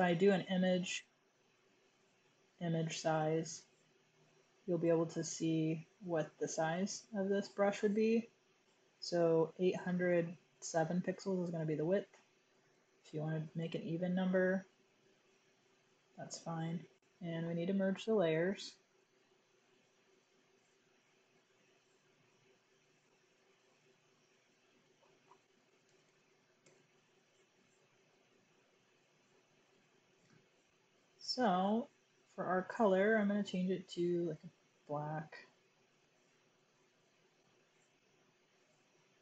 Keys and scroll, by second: 12.7 BackSpace, 12.8 0, 13.5 Tab, 17.2 typing, 20.0 super+e, 25.5-26.7 typing, 28.8 typing, 31.6 typing, 32.6 typing, 33.6-34.2 typing.